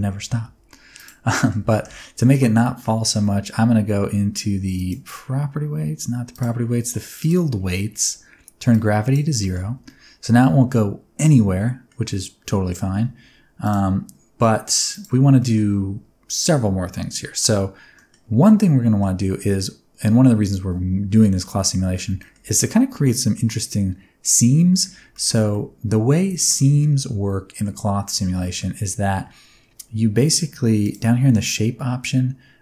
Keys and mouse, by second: 0.4 space, 0.9 click, 1.3 middle click, 1.7 shift+middle click, 1.9 middle drag, 4.7 click, 6.3 click, 8.7 click, 9.4 middle drag, 9.6 space, 9.9-11.9 middle drag, 13.0 space, 13.6 click, 14.9 click, 15.4 shift+middle click, 17.9 middle click, 18.8 middle click, 21.5 middle click, 22.2 shift+middle click, 23.0 middle click, 25.1 shift+middle click, 25.5 middle click, 26.3 shift+middle click, 26.8-27.6 middle drag, 28.4 middle click, 30.8 click.